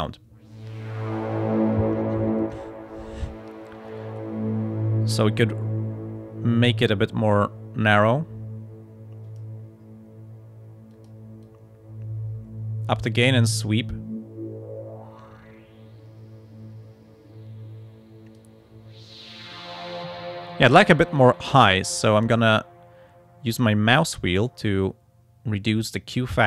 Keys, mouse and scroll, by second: 2.4-5.5 drag, 6.7-9.6 drag, 10.9 click, 11.4-18.6 drag, 21.7 scroll down 1, 23.8-24.5 scroll down 1, 24.7-25.2 scroll up 2.